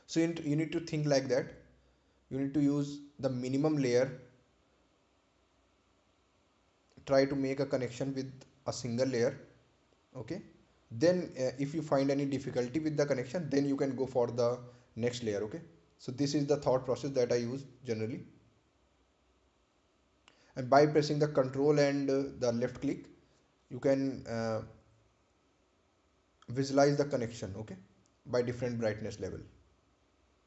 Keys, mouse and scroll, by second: 5.3 click, 9.0 click, 13.2 click, 16.7 click, 20.1 click, 21.4 right click, 24.1 ctrl+click, 24.9-25.5 scroll down 1, 25.5-27.0 scroll up 1, 27.9 scroll up 1, 28.1 ctrl+click.